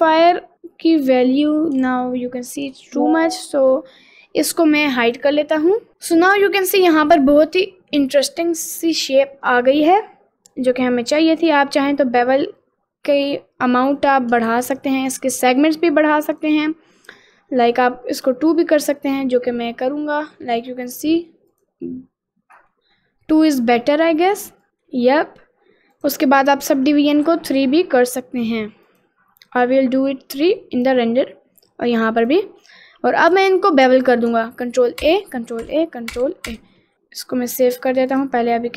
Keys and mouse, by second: 2.1 ctrl+z, 5.0 click, 6.2 middle click, 6.6 middle click, 7.5 middle click, 8.5-9.5 middle drag, 9.7 middle click, 11.7-14.3 drag, 14.8 ctrl+z, 16.4 click, 17.8 click, 19.2 middle click, 21.6 click, 22.8 middle click, 24.7 middle click, 26.1 click, 27.3 click, 29.0 click, 30.9 click, 32.4 click, 33.3 click, 35.1 ctrl+a.